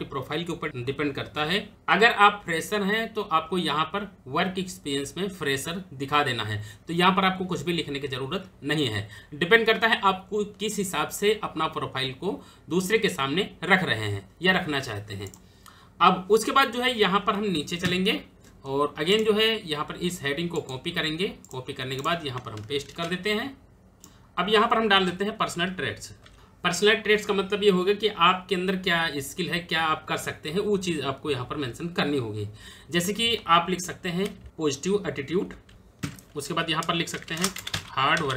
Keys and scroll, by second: 17.5 Return, 22.6 ctrl+v, 26.1 p, 35.6 p, 35.7 Return, 36.7-37.7 typing.